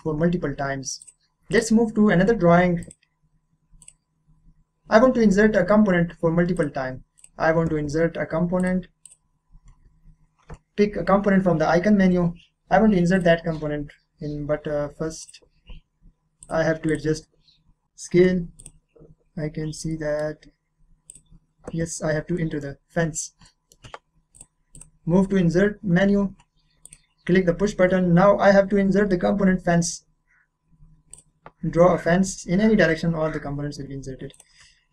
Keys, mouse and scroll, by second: 1.0 click, 6.5 click, 7.2 click, 8.6 click, 13.2 click, 14.1-15.2 scroll up 1, 18.6 click, 19.1 scroll up 1, 20.1 scroll up 1, 21.1 click, 21.6 click, 21.9 scroll down 1, 22.4 middle click, 22.7 scroll down 1, 23.4 middle click, 24.3 click, 26.8 click, 27.4-27.9 scroll down 1, 31.1 click, 34.3 click.